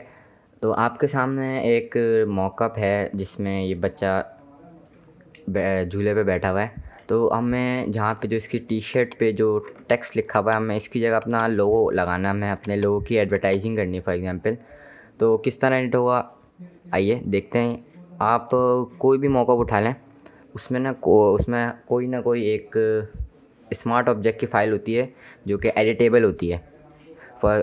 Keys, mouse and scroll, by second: 8.4 space, 8.6 ctrl+click, 8.9 ctrl+space, 10.1 click, 10.9 click, 11.2 space, 12.4 click, 12.7 space, 12.9 space, 13.1 click.